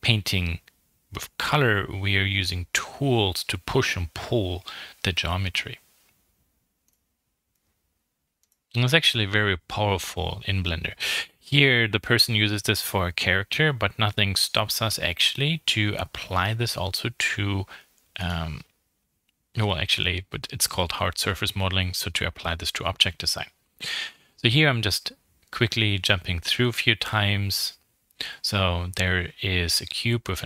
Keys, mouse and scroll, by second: 0.7 scroll down 2, 0.9 middle click, 1.7 scroll up 3, 3.5-6.6 drag, 6.8-8.1 middle drag, 8.1 click, 8.6 middle click, 8.6 scroll up 5, 8.9-10.3 middle drag, 10.3 click, 11.1 scroll down 3, 11.4 middle click, 11.8 alt+m, 12.0 middle click, 12.7 click, 13.3 middle click, 13.4-13.8 scroll up 3, 13.8-16.4 shift+middle drag, 16.4 scroll up 2, 16.7 middle click, 16.9-17.2 scroll down 3, 17.2 middle click.